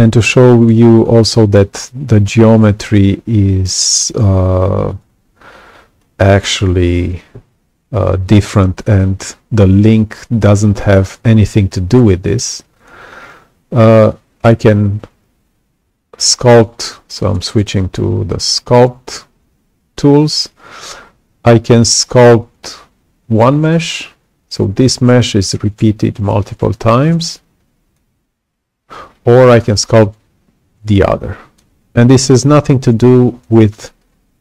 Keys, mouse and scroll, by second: 5.9 click, 12.7 click, 27.1 click, 30.9 click.